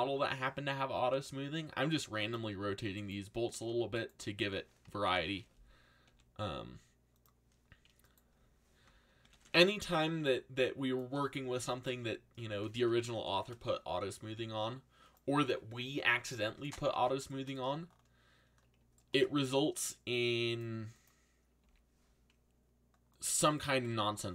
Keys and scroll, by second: 1.1 r, 5.0 ctrl+l, 6.0 r, 9.2 ctrl+l, 10.2 r, 13.1 ctrl+l, 14.3 r, 17.6 a, 21.6 z.